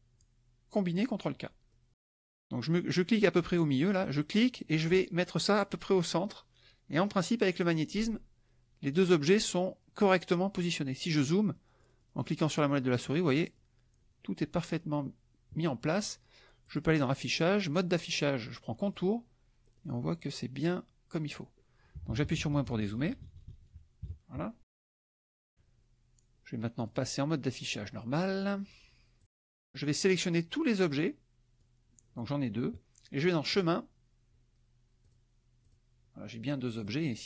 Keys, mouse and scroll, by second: 1.1 click, 1.7 click, 4.4-9.0 drag, 11.2-13.7 drag, 14.7 click, 16.6 click, 18.9 click, 19.7 click, 21.9 KP_Subtract, 25.1-27.1 drag, 29.3 click, 30.0-31.8 drag, 33.5 click, 35.0 click, 36.9 click.